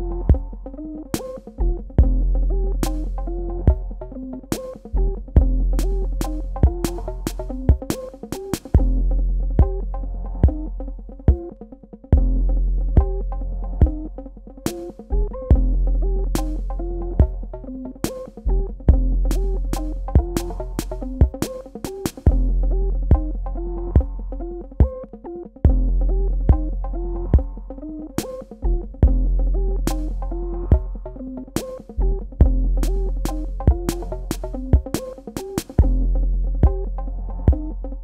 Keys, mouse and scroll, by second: 1.3 space, 1.6 ctrl+alt+click, 3.6 z, 3.9 click, 5.8 alt+click, 11.3 ctrl+space, 11.4 ctrl+click, 11.9 ctrl+space, 12.8 ctrl+alt+click, 19.3 alt+click, 22.2 alt+shift+Num_Lock, 23.3 ctrl+d, 24.0 typing, 27.6 click, 29.6 alt+click, 33.5 ctrl+d, 36.0 ctrl+d, 36.7 click, 37.5 space.